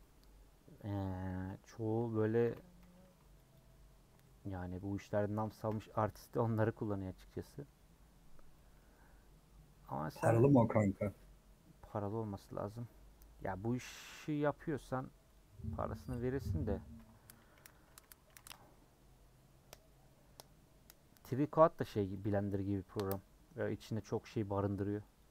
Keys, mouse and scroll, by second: 0.0 middle click, 0.7 scroll up 1, 2.4 a, 3.5 u, 4.2 middle click, 4.5 scroll down 3, 4.7-6.2 middle drag, 6.2-6.8 scroll up 5, 6.8 middle click, 7.2 scroll down 3, 7.5-25.3 middle drag.